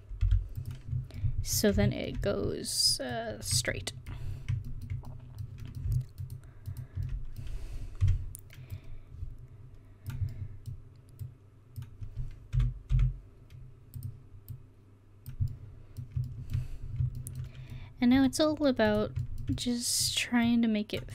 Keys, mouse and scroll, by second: 6.3 right click, 8.1 o, 8.8-10.1 drag, 10.4 click, 11.3-12.6 drag, 12.6 s, 15.6-16.7 middle drag, 18.2 middle click, 18.9 right click, 19.4 middle click, 19.7 middle click.